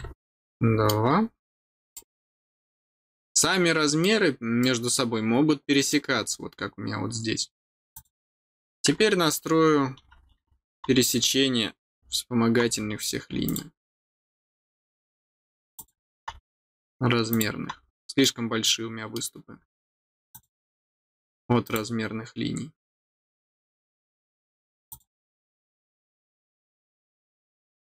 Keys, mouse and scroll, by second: 0.4 middle click, 1.0-1.3 scroll down 2, 1.9-4.0 middle drag, 4.6-5.9 middle drag, 6.5 scroll up 1, 6.5 middle click, 6.9-7.4 scroll down 1, 7.9 click, 13.4 click, 15.7 click, 17.3 click, 17.9 middle click, 18.6 middle click, 20.3 click, 21.6 click, 24.8 click, 26.5 scroll down 1, 27.1 scroll down 1, 27.6 middle click.